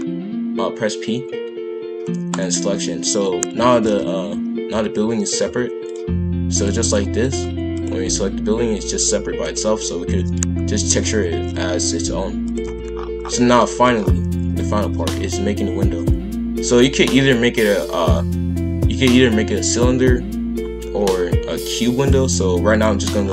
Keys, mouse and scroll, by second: 3.7 shift+f, 6.5 click, 6.8-7.8 drag, 8.0 g, 10.1 shift+f, 12.6 KP_5, 12.6 KP_1, 12.9-13.6 scroll down 8, 13.6 shift+middle click, 13.9-14.7 scroll up 1, 14.7 shift+a, 23.2-23.3 scroll down 6.